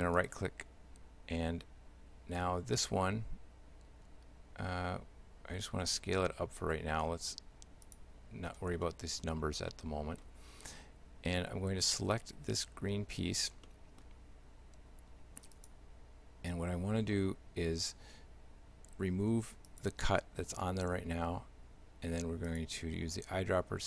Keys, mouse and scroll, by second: 5.9 s, 8.9 middle click, 9.7 shift+middle click, 12.0 right click, 13.7 middle click, 15.6 click, 19.7 click, 22.5 click.